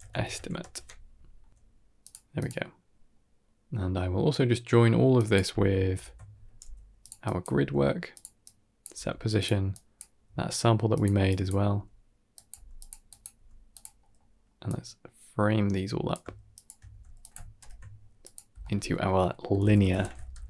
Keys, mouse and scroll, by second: 1.3 g, 2.2 click, 3.0 middle click, 3.4-3.9 scroll down 3, 3.9 middle click, 5.0 drag, 5.8 ctrl+h, 6.5 g, 7.1 drag, 7.4 g, 8.3 click, 8.8 g, 9.6 click, 10.1 g, 11.1 drag, 11.6 g, 12.4 g, 12.9 click, 13.7 g, 13.9 middle click, 14.1-14.5 scroll down 2, 14.5-16.1 drag, 16.4 shift+drag, 16.8 g, 17.5 ctrl+j, 18.1 click, 18.4 F2.